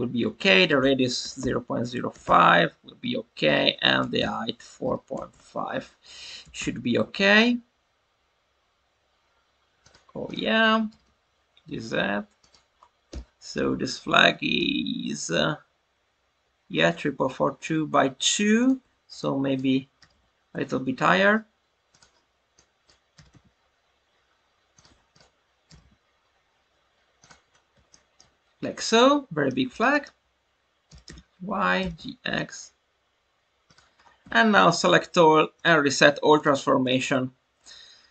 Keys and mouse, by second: 0.6-2.9 drag, 3.4-5.8 drag, 6.4 g, 6.5 z, 9.7 click, 10.2-10.8 drag, 10.8 g, 11.0 z, 12.3 click, 14.4 click, 18.5 click, 18.8 Tab, 19.2 click, 21.0 Escape, 22.5 drag, 24.7 click, 24.8 Tab, 25.6 g, 25.7 z, 27.1 click, 27.8-28.2 shift+middle drag, 28.8-29.4 middle drag, 29.7 alt+middle click, 30.8 g, 31.0 y, 31.4 Escape, 31.7 g, 31.9 x, 33.6 click, 34.7 a, 36.3-38.1 drag.